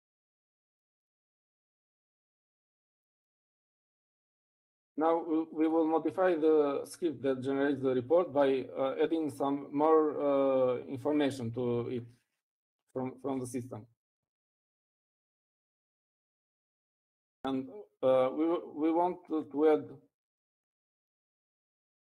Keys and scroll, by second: 5.1-5.8 typing.